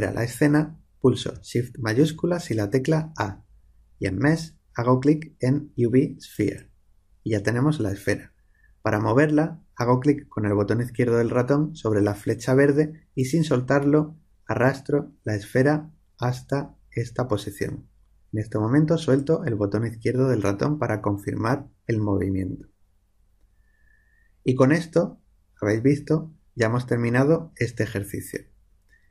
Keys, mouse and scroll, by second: 2.1 shift+a, 13.1-15.0 drag.